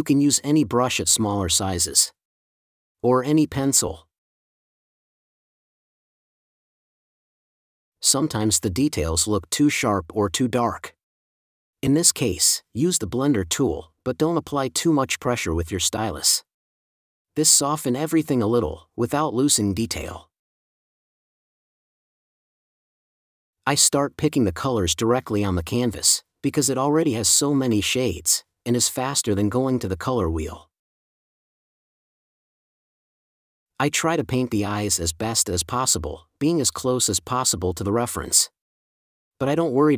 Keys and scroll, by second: 7.3 space, 8.4 4, 14.3 super+z, 17.2 space, 18.4 space, 32.1 space, 33.7 4, 34.3 n, 38.5 4.